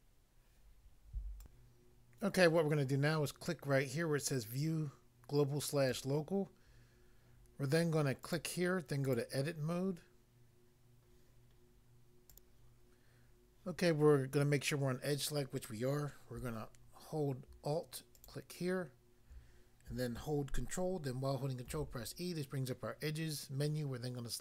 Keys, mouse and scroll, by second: 1.4 click, 5.9 click, 6.0 click, 8.2 click, 8.4 click, 9.0 click, 12.3 click, 12.4 click, 18.1 alt+click, 21.7 ctrl+e.